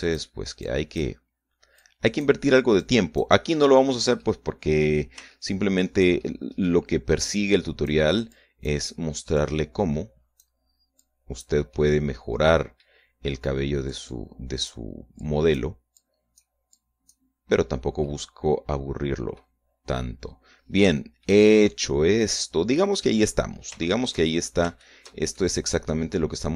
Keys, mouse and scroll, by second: 0.6 click, 1.5 click, 2.7 click, 3.7 click, 5.1 middle click, 6.3 shift+middle click, 7.1 shift+middle click, 8.1 click, 9.3 click, 10.3-11.5 drag, 11.9 click, 12.7-13.9 middle drag, 14.8-15.8 drag, 16.1 click, 16.9 click, 17.7 click, 18.4 scroll down 1, 19.0-20.5 middle drag, 20.7-21.1 scroll down 1, 21.8 shift+middle click, 21.9 shift+right click, 21.9-23.9 shift+middle drag, 24.1-24.6 scroll up 4, 24.9 shift+click, 25.3 shift+scroll up 2, 25.7 shift+click, 26.3 shift+click, 26.3 shift+middle click.